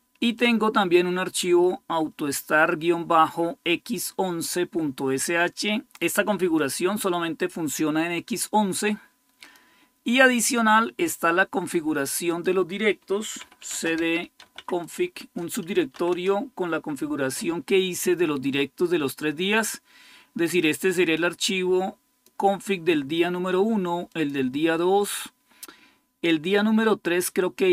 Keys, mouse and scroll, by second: 0.1-13.4 drag, 13.1-16.1 typing, 15.0 Return, 20.9-22.5 drag, 23.9 click.